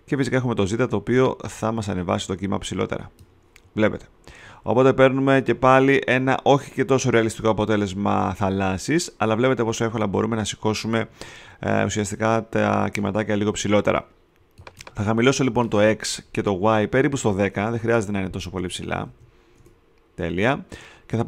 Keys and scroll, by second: 17.2 1, 17.7 0, 18.5 Tab, 19.0 0, 19.5 Tab.